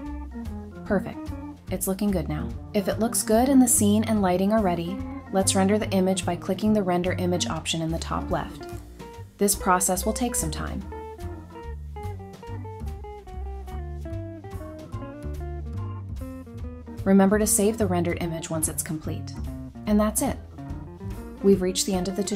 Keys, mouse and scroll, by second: 9.4 scroll down 1.